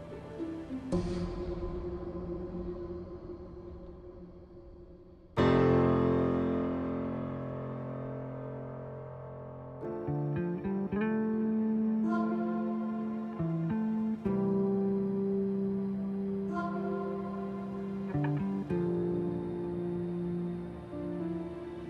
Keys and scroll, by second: 4.2 f, 11.5 s, 19.0 z.